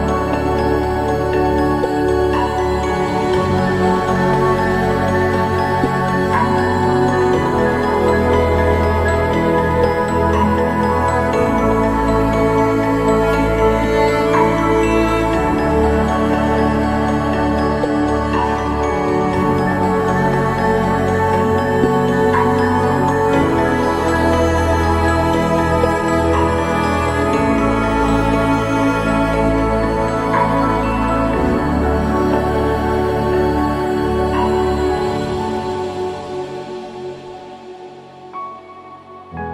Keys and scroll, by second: 28.8 ctrl+i, 29.4 ctrl+=, 37.1 ctrl+0.